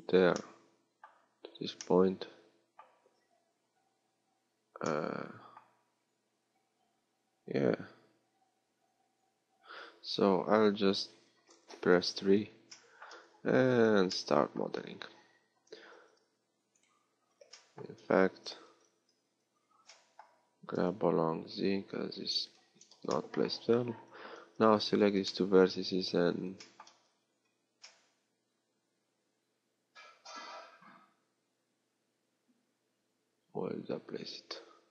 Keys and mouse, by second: 2.4-11.8 middle drag, 11.8 KP_3, 14.7 a, 15.7 b, 19.0 a, 19.5 a, 20.7 g, 24.1 a.